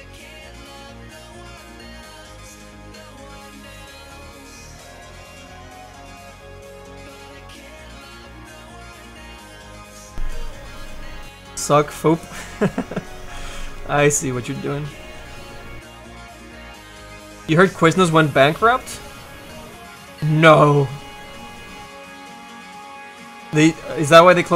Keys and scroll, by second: 0.5 s, 1.0 s, 5.9 s.